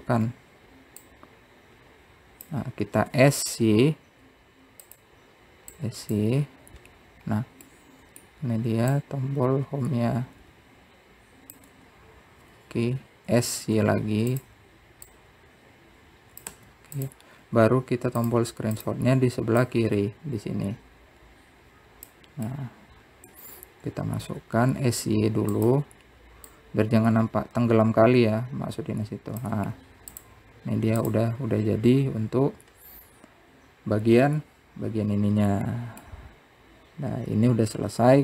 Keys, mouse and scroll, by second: 0.4 click, 1.0 middle click, 1.9 scroll down 1, 2.8 click, 5.0 s, 7.5 click, 8.1-8.8 scroll up 5, 9.5-10.7 middle drag, 10.7 click, 15.1 s, 16.9 click, 19.2 scroll down 3, 20.0 click, 20.5 click, 21.4 click, 24.3-25.3 middle drag, 25.3-26.0 scroll down 2, 26.0 s, 28.3 click, 32.5 scroll down 1, 32.8 click, 33.7-34.7 scroll up 1, 37.8-38.2 middle drag.